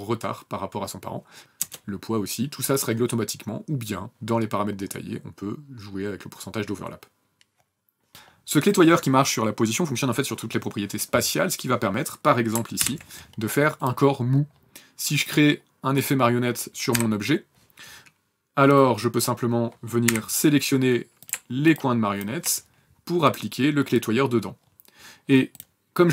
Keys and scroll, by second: 1.4 KP_0, 12.6 ctrl+p, 16.8 v, 19.9 u.